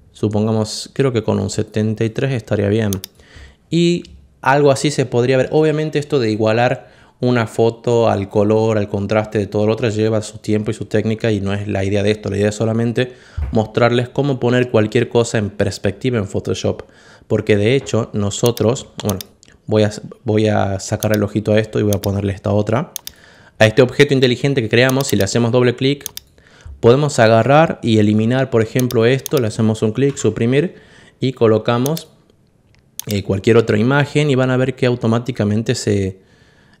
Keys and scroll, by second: 29.9 Delete.